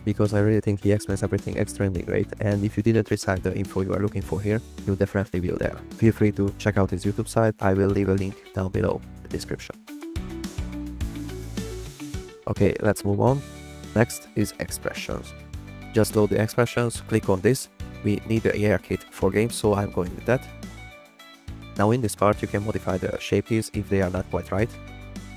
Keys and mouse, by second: 0.6 drag, 1.9 click, 2.5 click, 2.7 g, 7.1-7.9 drag, 9.2 drag, 9.6 a, 10.4 alt+r, 10.6 alt+g, 12.3 click, 13.0 middle drag, 13.4 click, 15.5 click, 17.0-20.6 drag, 23.5 click, 23.9-24.6 drag.